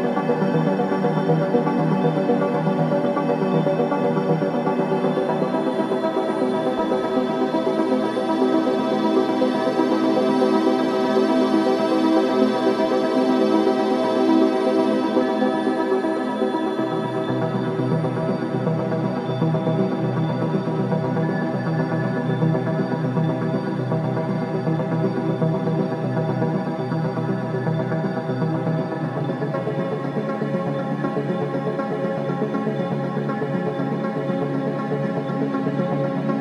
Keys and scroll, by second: 0.3 ], 0.6 ], 2.3 3, 4.9 3, 8.1 ], 9.9 ], 10.7 3, 18.7 2, 23.4 l, 23.7 Return, 27.9 4, 31.9 3, 35.5 ctrl+d, 35.5 Escape.